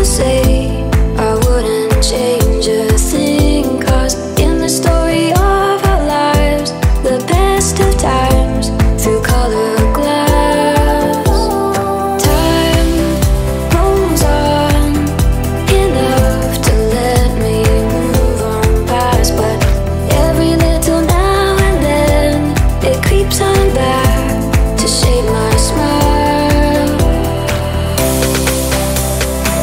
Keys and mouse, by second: 10.3-17.3 middle drag, 17.3-25.4 drag, 25.4-27.2 middle drag, 27.2-29.6 drag.